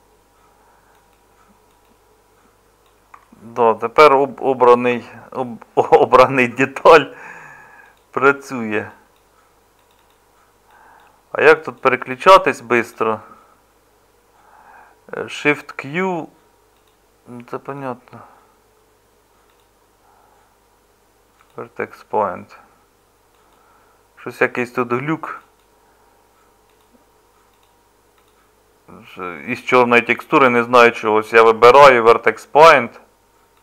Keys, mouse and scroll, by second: 3.6-4.9 middle drag, 4.9 Tab, 5.8 Tab.